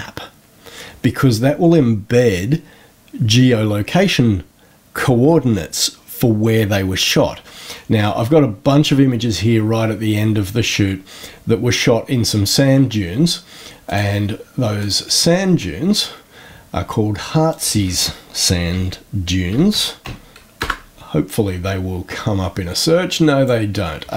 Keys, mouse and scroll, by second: 7.8-12.0 scroll up 14, 13.8 click, 14.7 click, 17.4 click, 18.2-20.5 typing, 20.5 Return, 23.0 click.